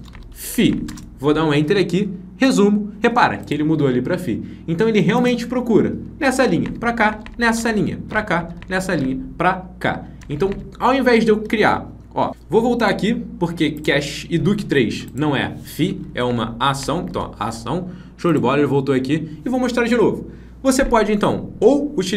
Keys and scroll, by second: 17.0 ctrl+d.